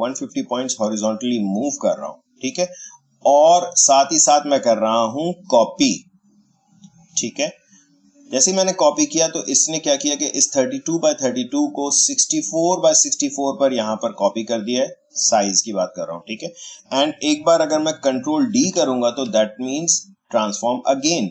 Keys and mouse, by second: 2.0 click, 7.3 click, 17.3 click, 18.6 ctrl+d.